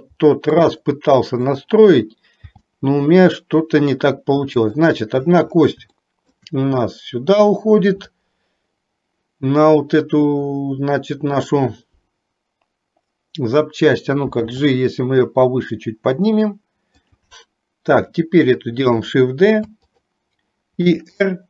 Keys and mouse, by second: 1.5 click, 2.5 g, 6.0 shift+middle click, 11.4 click, 14.4 g, 19.5 shift+d, 20.9 r.